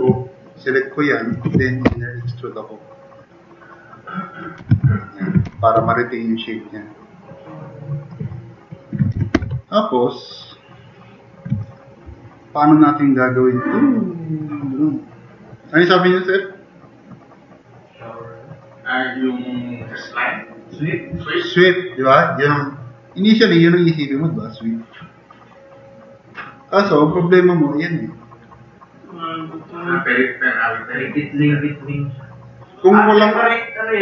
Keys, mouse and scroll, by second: 0.2-1.3 drag, 1.9 i, 2.8 click, 4.6 `, 5.0 click, 5.5 4, 5.9-6.6 drag, 7.0-7.4 drag, 7.6-8.1 drag, 8.6 click, 8.9-9.8 typing, 9.6 click, 9.9 drag, 10.7-11.4 drag.